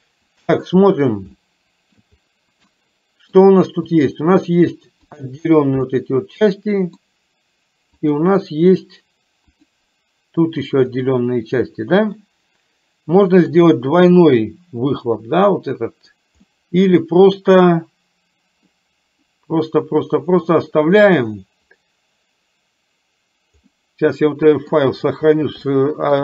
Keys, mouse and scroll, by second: 1.4 shift+middle click, 2.8 middle click, 4.0 click, 5.2 click, 5.9-7.2 middle drag, 8.0 click, 9.5 click, 12.3-13.6 middle drag, 16.5-18.8 middle drag, 23.8-25.4 middle drag, 25.7 shift+middle click.